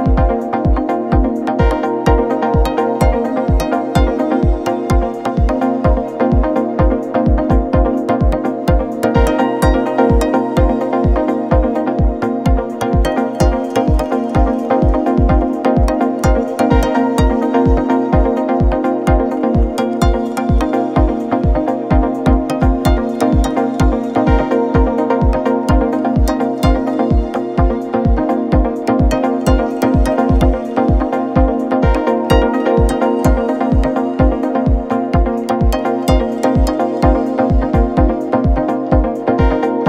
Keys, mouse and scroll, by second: 6.3 shift+middle click, 6.5-6.9 scroll up 1, 6.9 middle click, 7.5 scroll up 4, 7.8-10.9 middle drag, 11.1 drag, 11.7 click, 14.9-15.7 drag, 16.5-18.6 middle drag, 18.6 click, 19.9 click, 21.4 KP_0, 24.3-24.7 scroll up 1, 24.7 click, 25.4 scroll down 1, 26.2 click, 26.4 shift+d, 27.1 click, 27.2 shift+d, 27.6-28.0 scroll down 6, 28.0-29.7 middle drag, 29.7-31.7 drag, 32.4-35.7 drag, 36.1-37.1 drag, 38.0 scroll up 1, 39.1 click.